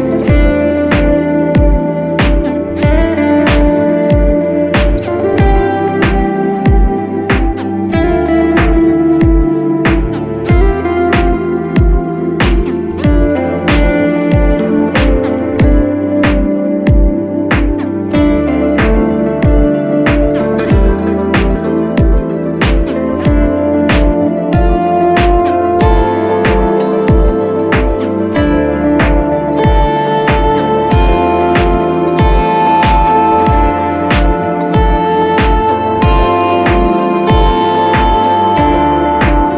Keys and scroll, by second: 0.7 5, 6.3 ctrl+alt+z, 7.4 ctrl+space, 14.4 2, 21.9 F2, 30.9 w, 31.9 space, 39.0 w.